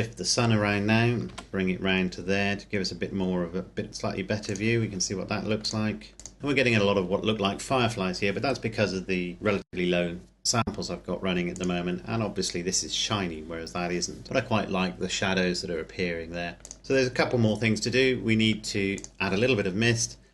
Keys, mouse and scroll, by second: 0.0 right click, 1.3 r, 1.5 z, 4.4 click, 11.7 click, 16.8 click, 19.2 click.